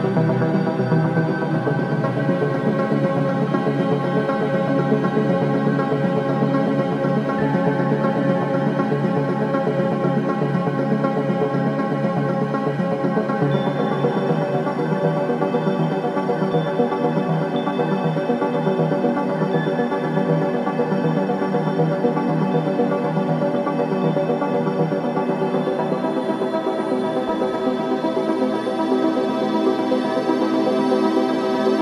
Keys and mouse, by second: 0.3 Tab, 2.6 KP_3, 3.7 g, 5.8 click, 6.6 KP_1, 9.2 Tab, 12.0 z, 13.6-16.2 drag, 16.2 s, 18.2-19.6 drag, 18.4 Tab, 19.4 z, 23.0 Tab, 23.6 s, 27.0 Tab, 28.6-29.0 drag, 30.0 z.